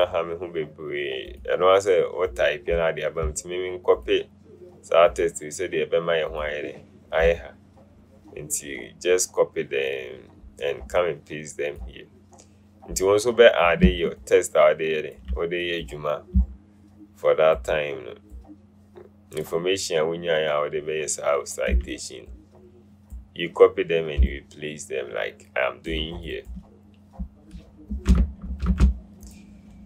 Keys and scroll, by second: 28.0 Up, 28.6 Up, 28.8 Up.